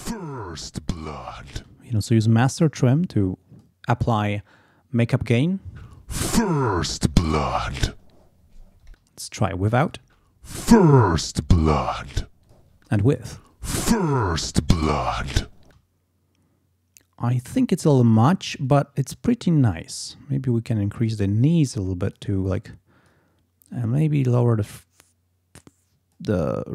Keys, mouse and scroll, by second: 1.5 space, 1.9 click, 5.7 space, 8.9 space, 9.8 click, 10.0 space, 12.4 click, 12.7 space, 15.6 space, 20.1-21.3 drag, 25.0-26.3 drag, 26.3-26.7 drag.